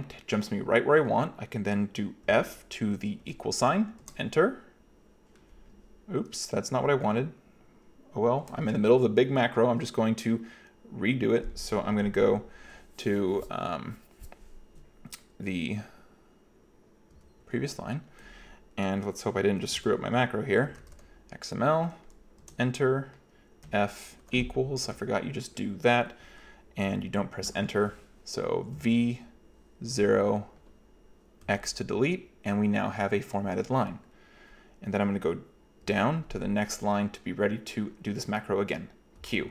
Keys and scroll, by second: 2.3 f, 3.3 =, 4.0 Return, 17.2 k, 19.8-21.4 typing, 22.4 Return, 23.7 f, 24.2 =, 28.8 v, 29.9 0, 31.5 x, 35.9 j, 39.2 q.